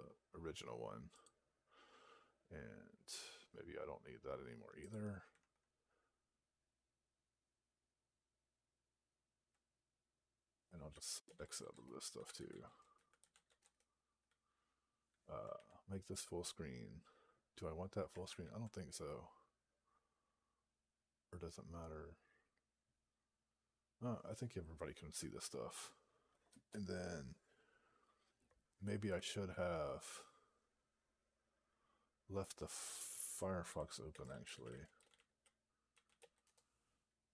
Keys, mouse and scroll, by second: 1.1 Return, 13.5 Return.